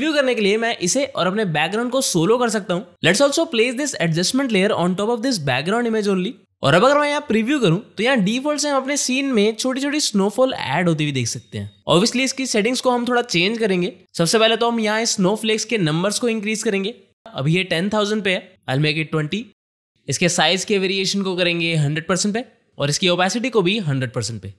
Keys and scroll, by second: 7.9 space, 11.7 space, 13.2 shift+/.